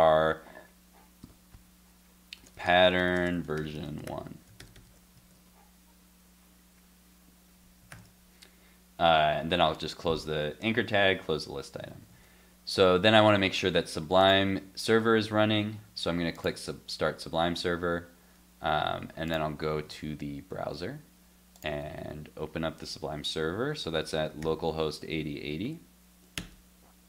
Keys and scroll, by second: 5.1 alt+super+., 5.1 super+s, 7.9 super+s, 12.1 super+s.